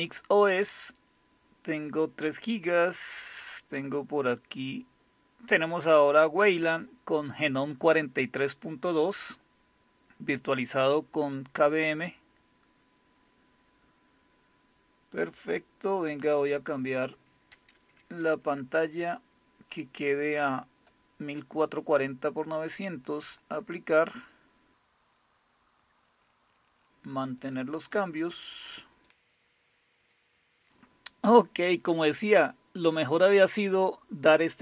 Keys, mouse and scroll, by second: 2.5-3.5 scroll down 1, 3.5-4.4 scroll down 1, 16.4 click, 18.9 click, 21.7 click, 22.5 click, 23.1 click, 25.1 click, 26.0 click, 26.7 click, 27.4 click, 28.9 click, 29.3 click.